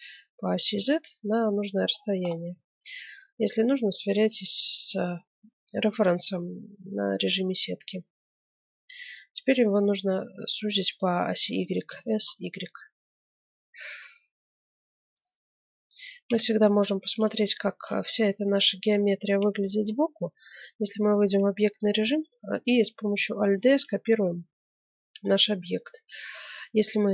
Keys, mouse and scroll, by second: 1.9-4.9 middle drag, 2.5 z, 3.9 g, 6.4-12.2 middle drag, 11.8 s, 15.4-16.4 middle drag, 16.2 KP_1, 18.0 scroll up 1, 18.9-20.0 middle drag, 19.4 Tab, 21.2-22.9 middle drag, 23.4 alt+d.